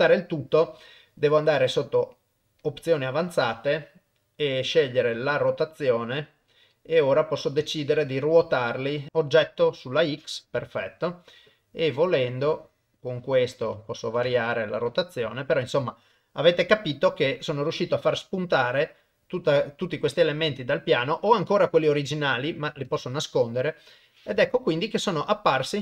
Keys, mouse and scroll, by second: 0.0 middle click, 2.6 click, 3.6 middle click, 5.2 click, 5.8 click, 7.5 middle click, 8.3 click, 9.1 middle click, 10.7 ctrl+middle click, 12.0-13.6 drag, 13.7 click, 14.8 middle click, 15.2 KP_0, 18.4-20.3 middle drag, 20.4 KP_0, 22.9 click, 25.7 middle click.